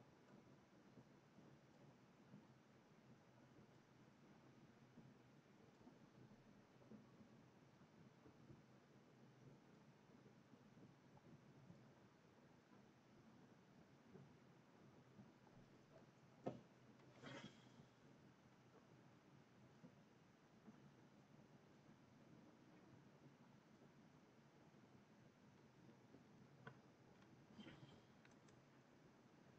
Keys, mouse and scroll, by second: 27.8 click, 28.1 alt+Tab.